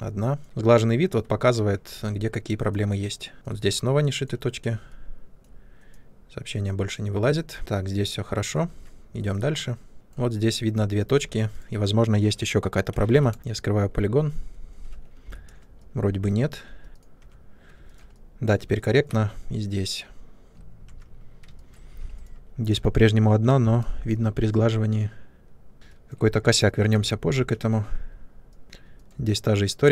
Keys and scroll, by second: 0.4 Tab, 1.9 Tab, 7.6 Tab, 8.6 Tab, 11.2 3, 15.1 u, 17.1 Tab, 20.8 Tab, 21.9 3, 25.7 u, 27.2 1.